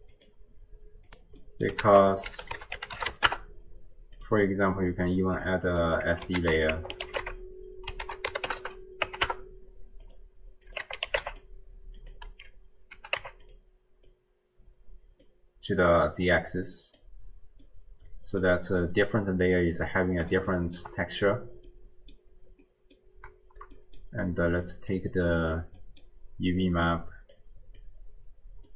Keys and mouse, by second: 1.4 middle click, 1.8 ctrl+a, 4.7-5.5 drag, 5.5 middle click, 6.4 ctrl+a, 10.6 click, 12.0-13.6 drag, 14.2-15.6 drag, 16.4 click, 17.8 click, 18.1 right click, 20.0-20.8 drag, 21.7 click, 21.8 middle click, 21.9 click, 22.7 click, 22.7 middle click, 22.9 click, 23.8 middle click, 24.7 click, 25.8 middle click, 26.7 click, 27.8-28.7 drag.